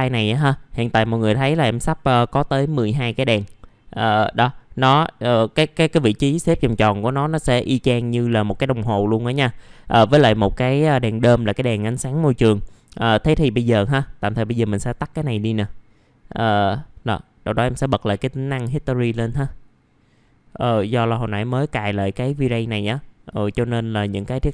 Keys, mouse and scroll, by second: 3.5 middle click, 3.8 scroll down 1, 4.9-24.5 drag.